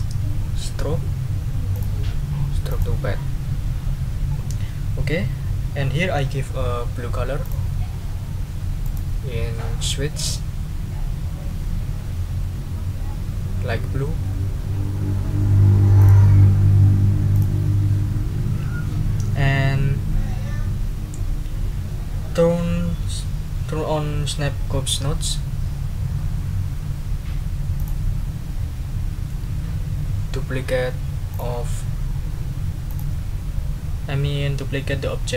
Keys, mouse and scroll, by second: 1.7 click, 2.7 click, 7.4 click, 8.8 click, 16.0 click, 17.3 click, 27.7 click, 31.3 click, 32.9 click.